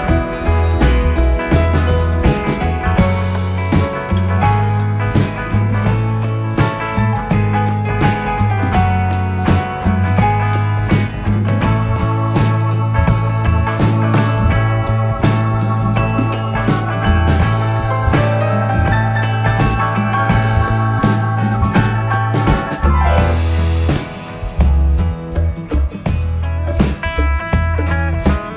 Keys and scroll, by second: 24.3 Left, 24.6 Down, 25.1 Right, 26.3 Up.